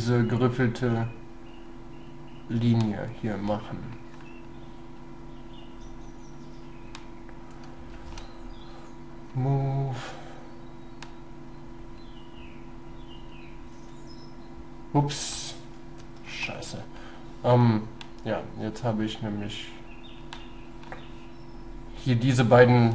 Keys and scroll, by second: 8.0 shift+s, 13.8 shift+s, 16.0 ctrl+y.